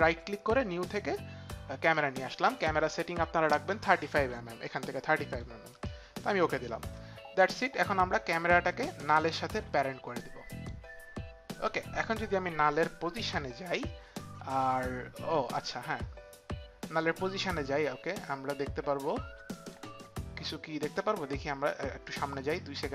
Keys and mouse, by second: 1.8 right click, 1.9 click, 4.6 click, 5.3 click, 6.3 click, 9.1 click, 12.1 click, 13.1 p, 17.3 click, 22.0 click.